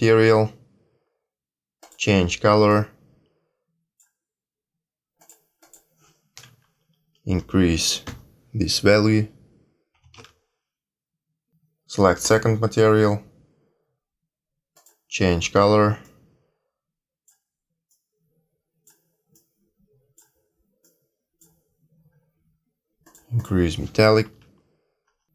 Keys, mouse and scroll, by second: 1.8 click, 5.1 click, 12.2 click, 14.7 click, 23.0 click.